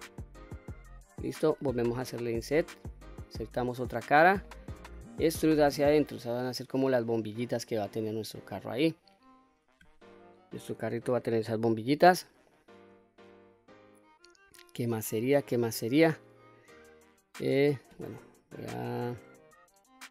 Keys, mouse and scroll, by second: 0.6 click, 1.0 middle click, 1.8 i, 4.0 click, 4.4 middle click, 5.3 e, 6.9 click, 7.4-7.8 scroll down 1, 7.8 middle click, 9.4-10.1 scroll down 1, 11.8 middle click, 12.9-13.3 scroll up 1, 13.3-14.9 middle drag, 15.2 scroll up 2, 15.6-17.9 middle drag, 19.3-20.1 middle drag.